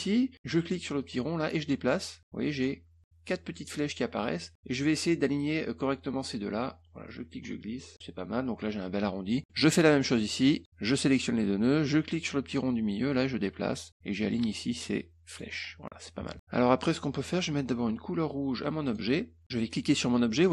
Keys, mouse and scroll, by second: 1.0-5.1 drag, 7.0 click, 9.4-9.8 scroll up 3, 10.3 click, 10.7 click, 12.2-15.4 drag, 16.1 middle click, 16.3 click, 16.3 middle click, 18.8 click, 19.8 click.